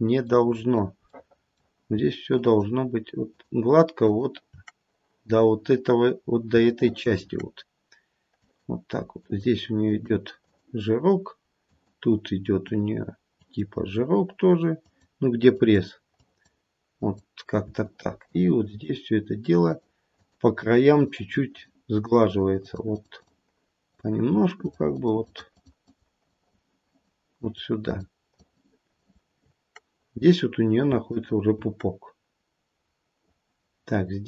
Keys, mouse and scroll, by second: 1.1 middle click, 2.4 shift+click, 3.5 shift+click, 4.0 shift+click, 6.0-6.4 scroll up 1, 6.6 shift+middle click, 7.3-8.4 scroll up 1, 8.4 click, 9.1 click, 9.9 click, 10.4 click, 11.6 click, 12.5 click, 13.4 click, 14.7 click, 15.6 click, 16.2 click, 16.9 click, 17.8 shift+click, 18.6 shift+click, 19.6 shift+click, 21.0 shift+click, 21.4 shift+click, 21.9 shift+click, 22.3 shift+click, 22.6 shift+click, 22.9 shift+click, 23.2 shift+click, 23.8 shift+click, 24.5 shift+click, 24.9 shift+click, 25.3 shift+click, 25.5 shift+click, 25.8 shift+click, 26.2 shift+click, 26.8 shift+click, 27.3 shift+click, 27.8 shift+click, 28.3 shift+click, 28.9 shift+click, 31.1 shift+click, 32.2-32.8 scroll down 1, 32.8-33.9 scroll down 3, 33.9-34.2 scroll up 4.